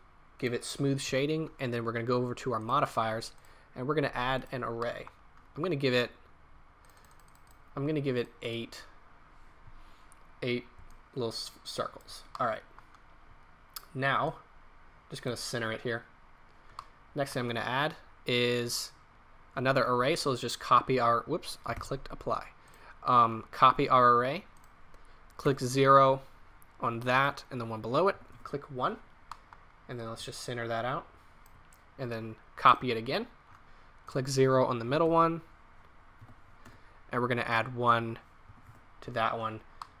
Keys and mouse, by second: 4.8-6.8 middle drag, 8.9-10.7 middle drag, 10.9-11.3 middle drag, 16.7 middle click, 21.7 ctrl+z, 28.9 middle drag, 30.3-31.3 drag, 39.8-40.0 middle drag.